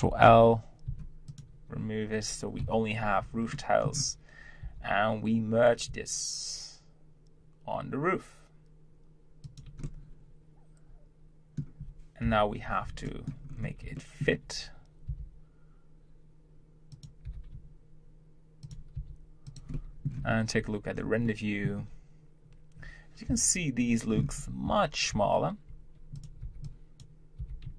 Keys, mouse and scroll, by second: 0.1 ctrl+l, 0.9 x, 1.7 Tab, 2.6 KP_7, 3.5-4.6 shift+middle drag, 4.6 g, 9.8-12.2 middle drag, 13.1 shift+middle click, 13.5-13.8 scroll up 1, 14.0-15.1 shift+middle drag, 15.1 r, 19.7 middle click, 20.2 z, 20.9 scroll down 1, 21.2-23.3 middle drag, 24.2 scroll up 1, 24.7 Tab, 25.2 z, 26.1 click, 26.4 b.